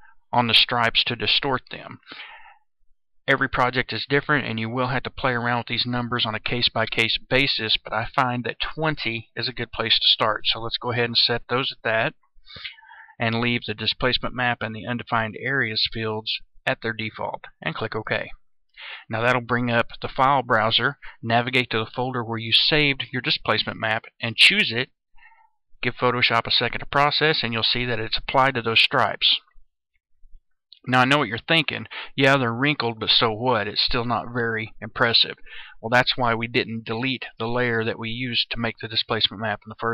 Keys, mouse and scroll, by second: 9.2 KP_2, 9.5 KP_0, 10.9 Tab, 11.9 KP_2, 12.1 KP_0, 17.6 click.